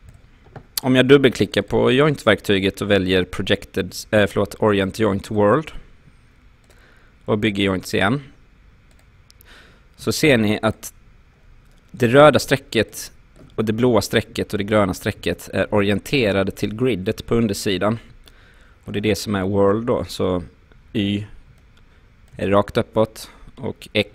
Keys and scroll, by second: 10.0 q.